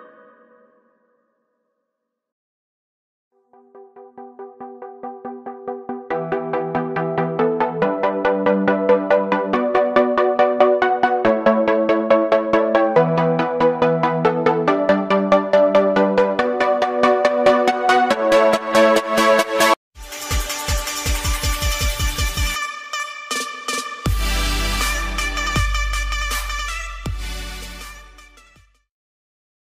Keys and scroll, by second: 2.0 ctrl+d, 4.1 ctrl+s, 11.1 ctrl+space, 12.3 ctrl+z, 14.6 ctrl+s.